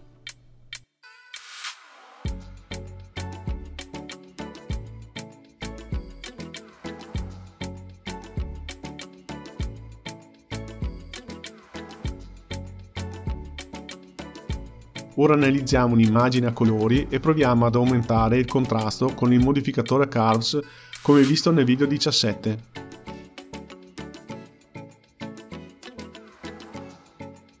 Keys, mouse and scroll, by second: 11.0 click, 11.3 g, 13.4 shift+a, 21.6 click, 22.3-23.9 drag, 23.9-24.9 scroll down 5, 24.9-27.6 drag.